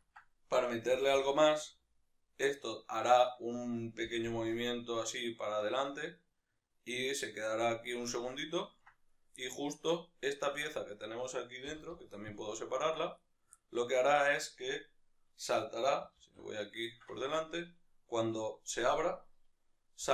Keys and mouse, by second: 0.9 g, 3.4 right click, 4.1 g, 8.1-9.1 shift+middle drag, 9.1-9.4 right drag, 9.4-11.0 middle drag, 10.7 Tab, 11.0 right click, 11.7 l, 12.5 p, 13.0 Tab, 13.2 right click, 13.6-20.1 middle drag, 16.4 alt+q, 20.0 g.